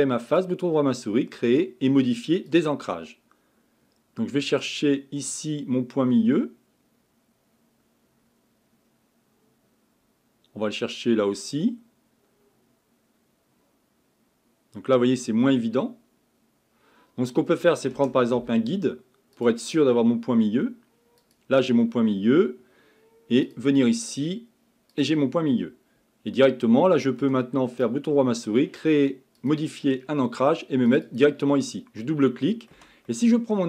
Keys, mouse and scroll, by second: 2.9 click.